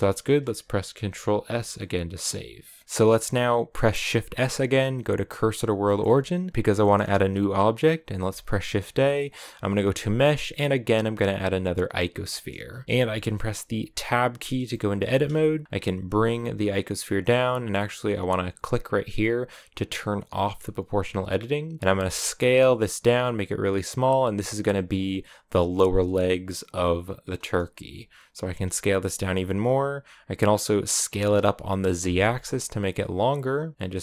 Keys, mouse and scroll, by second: 5.8 shift+s, 6.6-11.9 shift+middle drag, 12.7-13.9 shift+middle drag, 13.9 Tab, 14.5-15.6 shift+middle drag, 15.6 g, 20.4 click, 20.9-21.8 scroll up 1, 21.8 s, 26.1 middle click, 26.7-28.3 scroll up 2, 28.3 s, 30.9 s.